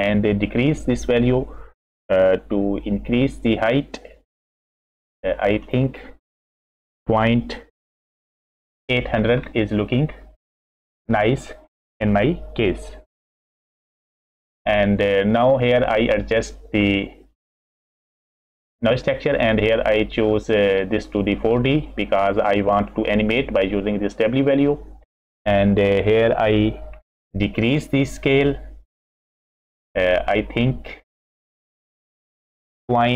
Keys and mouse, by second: 3.0-5.4 shift+middle drag, 5.6-8.6 shift+drag, 9.4-10.4 middle drag, 15.7 middle click, 16.5 middle click, 19.2-21.2 drag, 25.2 middle click, 27.7 click, 28.8 middle click, 31.0-32.6 drag, 32.8-33.1 drag.